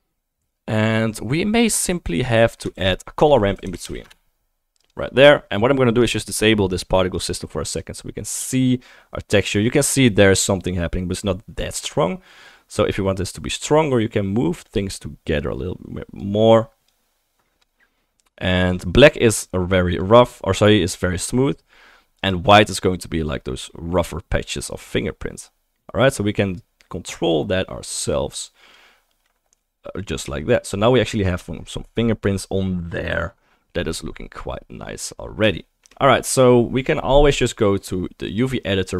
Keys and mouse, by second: 2.8 shift+a, 5.0-14.9 right drag, 6.0 click, 6.0 middle click, 7.8 click, 7.8 middle click, 14.6 click, 14.6-17.3 middle drag, 15.9 click, 15.9 right click, 17.8 middle click, 18.2-19.1 middle drag, 19.2-19.8 middle drag, 20.2-35.8 middle drag, 38.2-38.9 middle drag.